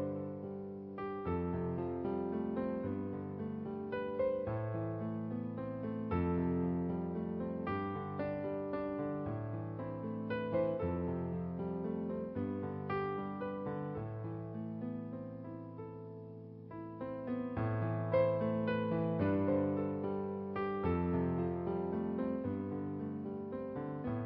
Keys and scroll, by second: 0.6-1.1 typing, 2.5-3.2 typing, 4.9-5.5 typing.